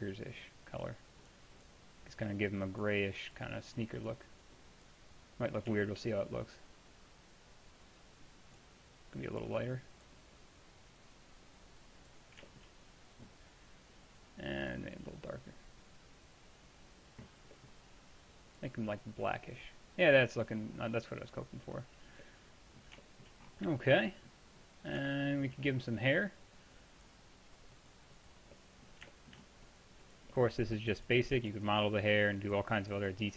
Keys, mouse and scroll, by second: 5.8-6.2 middle drag, 6.2-12.0 drag, 12.5-14.7 middle drag, 14.7-17.6 drag, 18.6-21.0 drag, 22.1-22.8 middle drag, 30.4 drag.